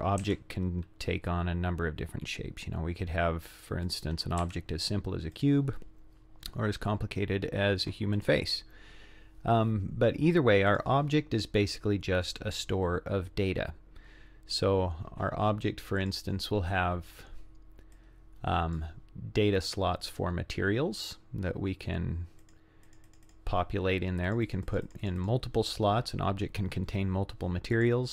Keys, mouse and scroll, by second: 0.2 shift+a, 4.4 g, 5.8-6.4 scroll down 3, 6.4-6.7 scroll up 5, 6.7-7.3 scroll down 2, 8.1 drag, 10.7 click, 16.0 click, 17.9 click, 22.4 click, 22.9 click, 23.1 click, 23.3 click, 24.3 click, 24.5 click, 24.7 click, 24.9 click, 25.1 click, 25.2 click, 27.8 click.